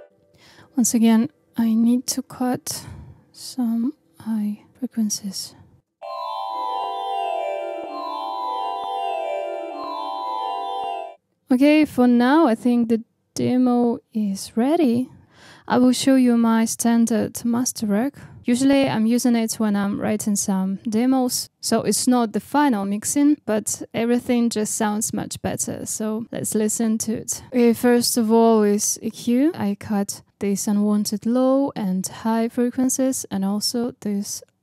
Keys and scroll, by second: 5.8 space, 29.5 space.